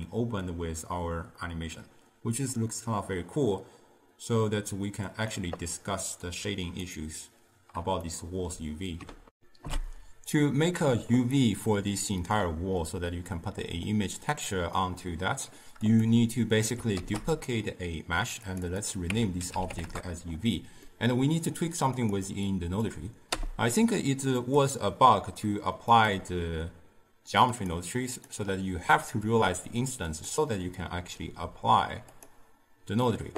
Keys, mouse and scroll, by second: 6.4-7.0 right drag, 8.2-9.4 ctrl+middle drag, 9.4 ctrl+alt+shift+q, 13.9-15.9 middle drag, 15.9 click, 17.0 shift+d, 18.5 click, 18.7-21.0 drag, 21.0-22.0 middle drag, 22.0 click, 22.5 click, 23.4 m, 24.5 click, 26.0 click, 27.6-33.2 drag.